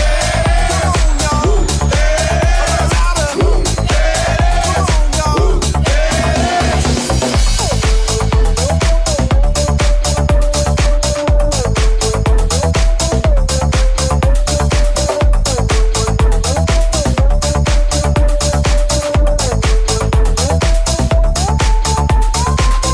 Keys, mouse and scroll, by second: 3.0-16.2 shift+middle drag, 9.3-16.2 right drag, 18.1 shift+click, 18.5-22.9 shift+drag.